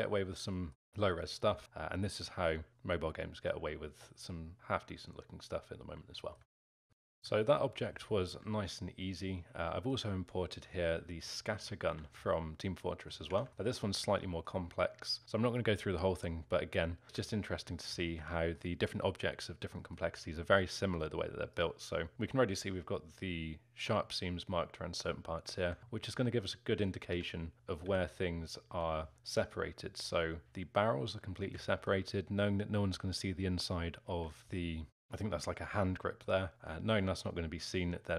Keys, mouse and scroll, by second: 5.9 Tab, 6.9-7.2 scroll down 5, 7.5-8.1 alt+middle drag, 8.1-8.5 scroll up 3, 8.5-11.8 alt+middle drag, 11.8 f, 12.3 alt+middle click, 13.1 scroll down 1, 13.3 Tab, 13.5 alt+middle click, 13.7-14.3 scroll up 3, 14.3 alt+middle click, 14.9-16.1 scroll down 1, 16.1 alt+middle click, 17.0 z, 17.4 alt+middle click, 18.0 z, 18.3-21.6 alt+middle drag, 21.6 click, 27.1 1, 28.7 l, 29.1 alt+middle click, 29.9 g, 30.5-38.1 alt+middle drag.